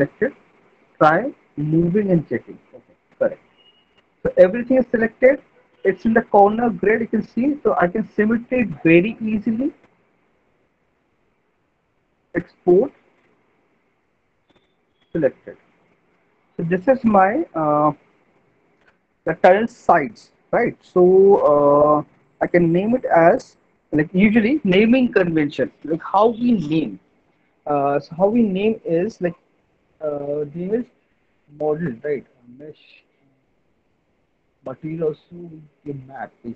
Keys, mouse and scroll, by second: 0.5 alt+middle click, 2.7 click, 3.1 ctrl+z, 5.4 middle click, 6.4 alt+middle click, 6.6 middle click, 6.9 middle click, 8.1 alt+middle click, 9.3 middle click, 10.1 alt+middle click, 10.7 middle click, 12.1 click, 17.6 click, 22.1 click, 26.6-29.4 drag, 32.8-36.5 drag.